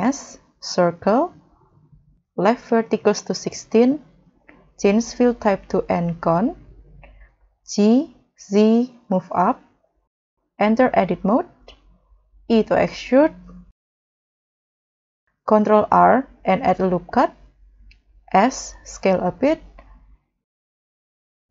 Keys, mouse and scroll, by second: 7.9 g, 9.6-11.3 scroll up 2, 12.3 w, 15.0 scroll up 1, 15.9 ctrl+r, 17.5 scroll up 2, 18.1 s, 19.7 scroll down 2.